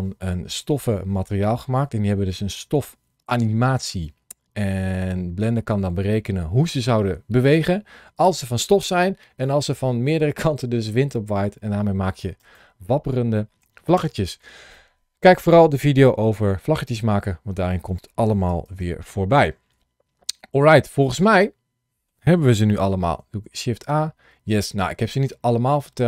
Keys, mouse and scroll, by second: 20.4-21.2 scroll down 1, 21.2 middle click, 23.1 shift+a.